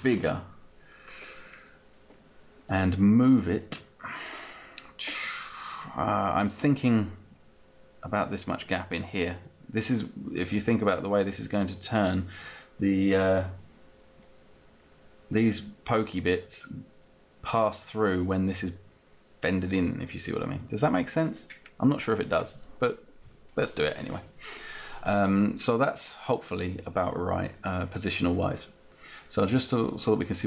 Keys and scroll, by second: 0.0-0.5 typing.